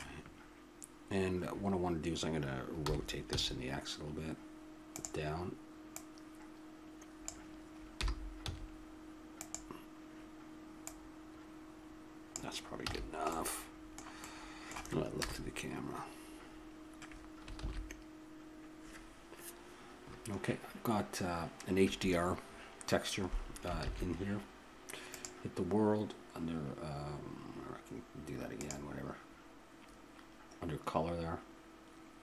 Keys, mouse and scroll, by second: 0.9-2.2 middle drag, 2.8 r, 5.9-7.9 drag, 7.9 r, 12.9 a, 13.3-15.1 middle drag, 15.1 KP_0, 17.8 shift+z, 23.8 shift+z, 26.8 click, 28.6-32.2 drag.